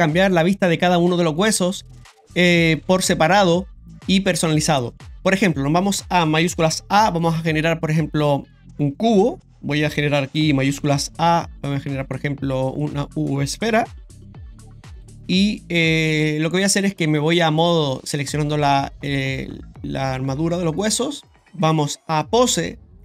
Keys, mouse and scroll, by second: 5.7 click, 6.6 shift+a, 8.6 ctrl+z, 9.1 shift+s, 9.5 shift+a, 9.8 click, 10.7 shift+a, 13.7 s, 17.6 click, 18.9 right click, 21.3 click, 21.6 click.